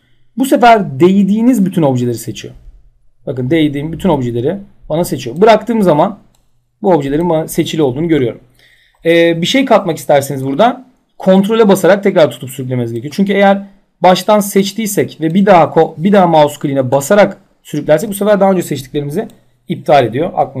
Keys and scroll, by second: 7.6 ctrl+z.